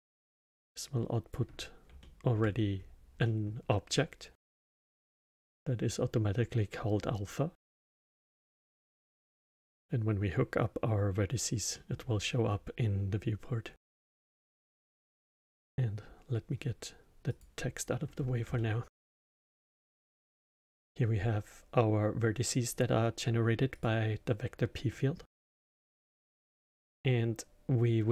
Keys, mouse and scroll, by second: 0.4 drag, 1.9-2.7 alt+middle drag, 2.7-3.2 scroll up 1, 3.2-6.2 middle drag, 9.1-14.6 middle drag, 14.6-17.3 drag, 18.1 scroll up 2, 18.5-22.6 alt+middle drag, 23.7 click, 24.9-27.9 middle drag.